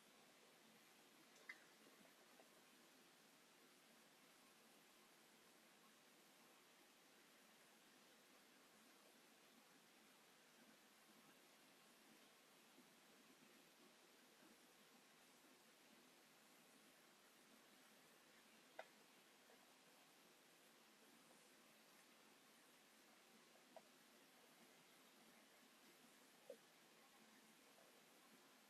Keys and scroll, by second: 1.0 9, 1.2 Return, 2.0 s, 4.4 m, 9.4 s, 13.6 m, 14.6 space, 21.2 space, 21.6 Escape, 21.7 space, 21.9 Escape, 22.9 Delete.